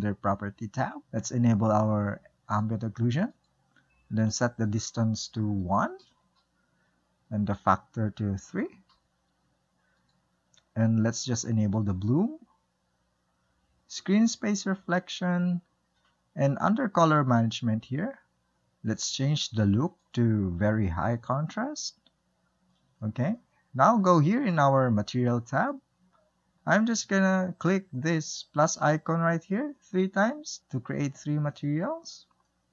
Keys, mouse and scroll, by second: 2.8 drag, 3.6 click, 4.9-12.5 drag, 14.7 click, 17.3-18.0 drag, 18.0-18.5 scroll down 2, 20.3-22.1 drag, 22.1-25.8 middle drag, 25.8 click, 29.9 click.